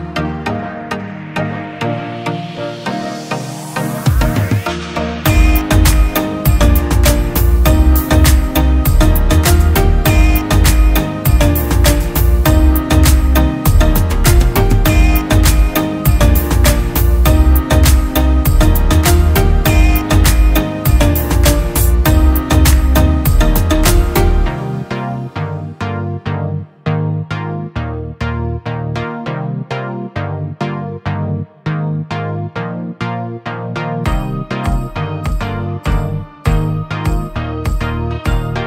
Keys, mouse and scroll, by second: 0.8-1.1 alt+scroll down 1, 3.2-3.6 scroll down 1, 22.2-24.8 scroll up 1, 31.5-34.2 scroll down 1.